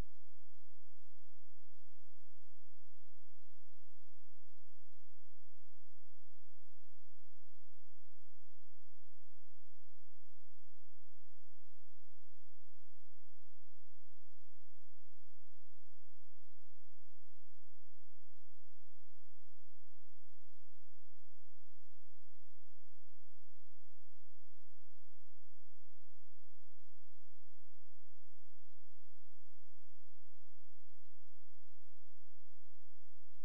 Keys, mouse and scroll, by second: 1.0 click.